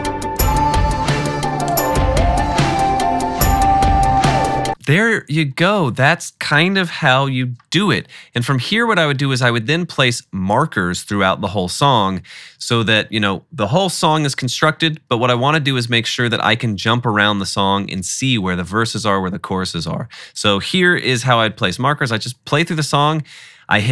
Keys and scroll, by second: 1.0-2.1 typing, 3.7 alt+super+l, 4.6 space.